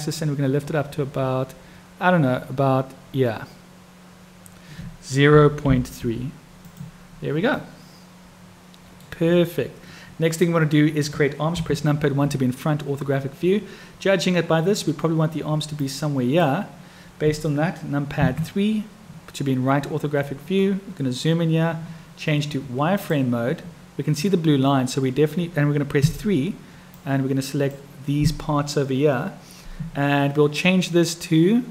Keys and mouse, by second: 7.6-9.0 middle drag, 11.5 KP_1, 15.7 click, 18.1 KP_3, 23.0 click, 27.1 click.